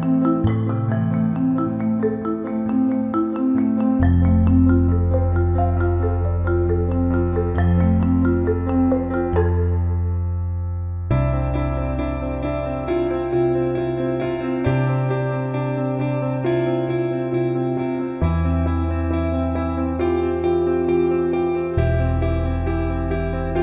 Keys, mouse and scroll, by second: 0.1-2.0 drag, 2.2 alt+middle click, 2.9-3.5 alt+middle drag, 4.0-4.8 alt+middle drag, 4.9 alt+shift+middle drag, 10.7-11.8 drag, 12.3 click, 14.0 click, 19.4-20.9 drag, 22.4 alt+middle click, 23.4 alt+shift+middle click.